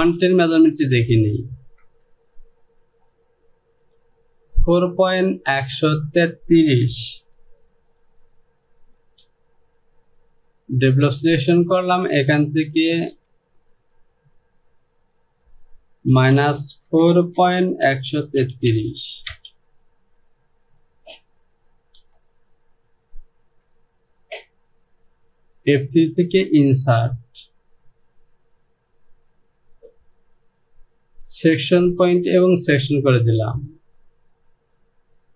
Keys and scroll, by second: 0.2 j, 1.9 Return, 7.4 j, 9.1 Home, 12.9 space, 13.2 space, 15.3 Down, 16.2 KP_Subtract, 16.9-18.8 typing, 19.4 Return.